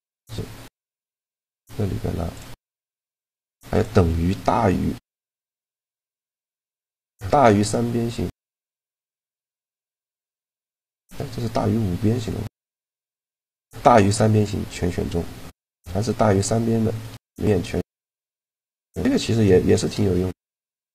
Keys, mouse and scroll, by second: 2.1 click, 2.1 shift+g, 2.7 middle click, 3.4-5.3 drag, 3.4-4.4 right drag, 7.1-8.8 middle drag, 10.6-12.5 middle drag, 12.5-14.4 drag, 13.8 middle click, 14.9-20.9 middle drag.